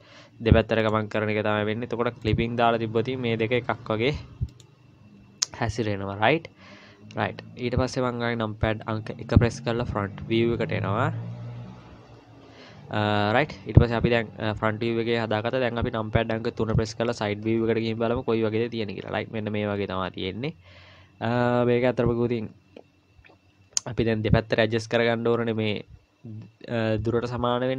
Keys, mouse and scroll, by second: 2.2 click, 3.1 g, 9.3 KP_1, 10.3-12.0 scroll down 3, 12.0-12.6 scroll up 2, 13.1-13.6 scroll down 1, 13.9-15.7 scroll down 1, 16.7 KP_3, 17.6-18.9 scroll down 13, 19.0-19.4 scroll up 1, 19.4 scroll down 1, 19.6 scroll down 1, 20.2-21.2 scroll down 3, 21.2-21.7 scroll up 2, 22.0 scroll up 1, 23.4-24.3 scroll up 1.